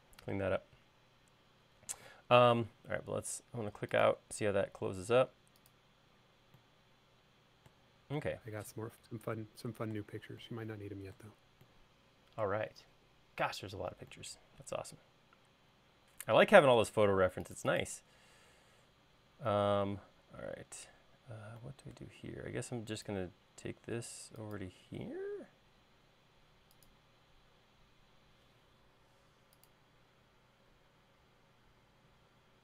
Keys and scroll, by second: 0.1 l, 2.2 space, 19.8 l.